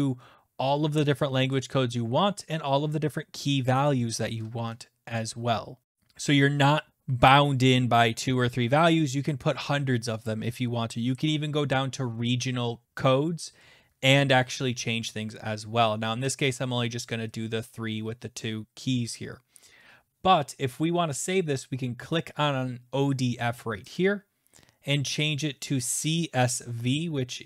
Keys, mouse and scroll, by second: 24.0 click.